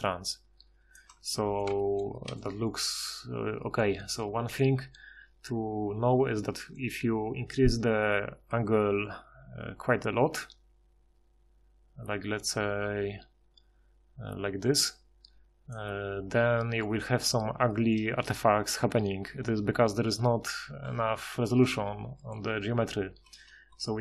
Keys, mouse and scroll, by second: 6.9 F6, 8.6 F6.